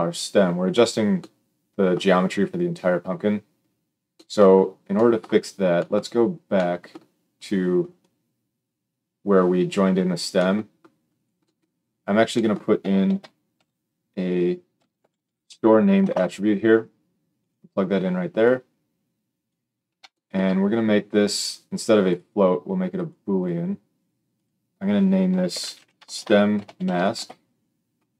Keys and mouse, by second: 11.3-18.4 middle drag, 13.0 shift+a, 18.4-28.1 drag.